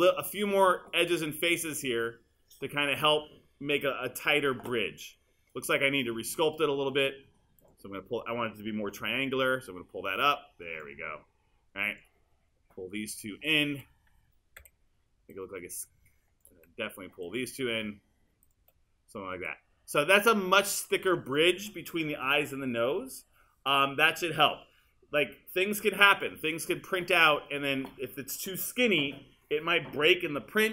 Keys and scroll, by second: 9.0 w, 14.6 r.